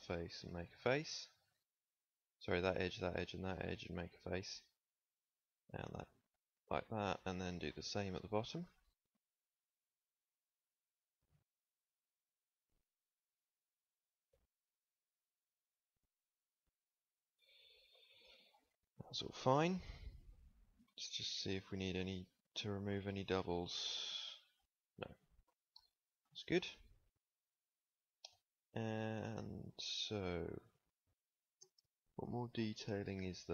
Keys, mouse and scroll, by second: 3.9 f, 6.3 f, 6.7 shift+click, 7.1 click, 8.3 click, 10.1 f, 13.3 f, 16.8 f, 17.9 ctrl+s, 18.9 Tab, 20.1 Tab, 20.9 a, 21.1 a, 21.6 w, 23.1 w, 26.2 KP_1, 27.5 Tab.